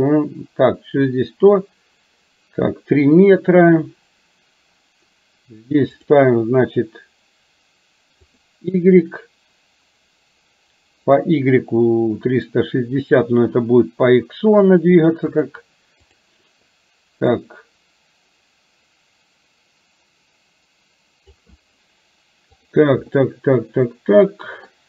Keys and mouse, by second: 6.0-8.5 drag, 15.4 click, 17.5-21.4 drag, 22.7 click, 23.2-24.7 middle drag.